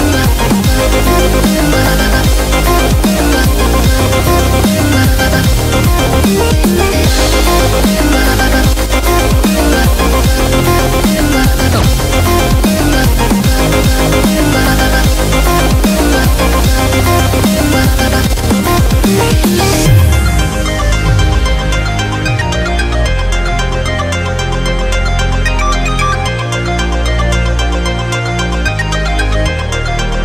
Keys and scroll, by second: 0.0-0.6 typing, 3.2-6.1 typing, 7.7 typing, 17.8-18.2 typing, 21.0 super+-, 21.2 super+-, 21.3 super+-, 21.8 super+-, 22.3 super+-, 24.3 super+g, 26.9-28.3 typing.